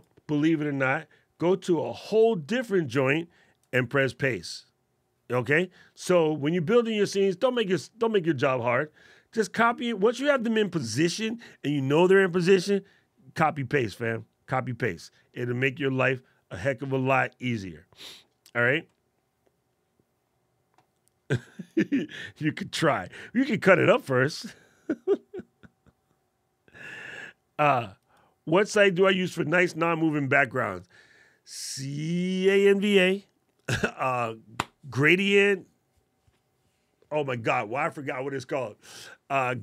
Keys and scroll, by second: 3.4 super+v.